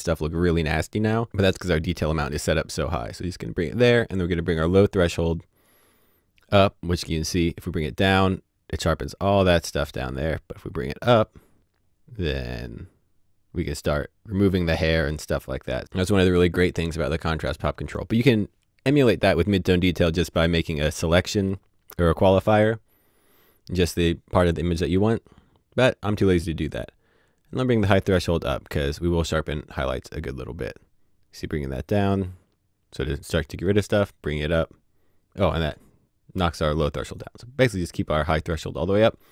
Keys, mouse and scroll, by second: 3.6 click, 5.6 click, 27.9 click.